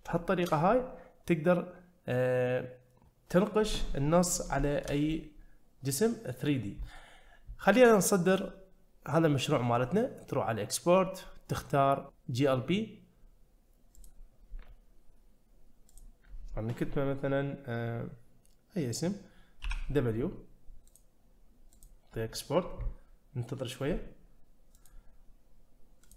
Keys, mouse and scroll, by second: 0.1 shift+middle click, 4.7 shift+middle click, 5.1-6.5 middle drag, 8.3-14.1 drag.